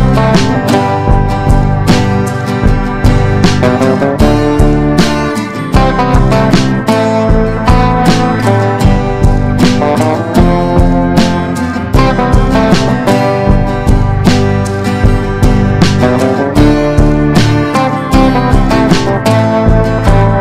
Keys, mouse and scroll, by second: 1.2 ctrl+d, 1.5-5.2 drag, 5.6 Up, 5.8 Up, 6.0 Up, 6.3 Up, 7.6 click, 8.0 shift+click, 9.2 click, 12.0 ctrl+d, 12.4-13.8 drag, 14.8 ctrl+d, 15.3 click, 17.6 shift+click, 18.3 shift+click, 19.4-20.4 drag.